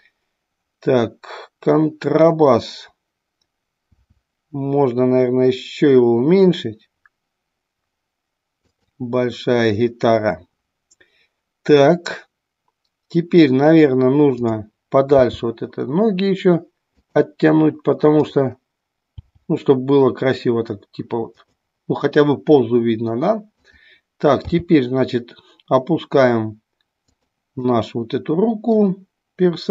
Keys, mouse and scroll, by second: 3.8 s, 8.7 click, 14.2 click, 15.3 g, 17.1 click, 19.2 g, 21.5 click, 23.6 click, 24.4 g, 27.7-28.8 middle drag.